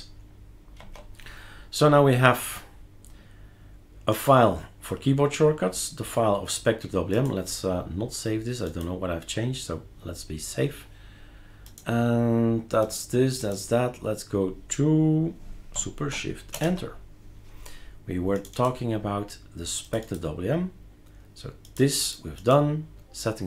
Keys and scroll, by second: 0.8 super+q, 16.5 shift+super+Return.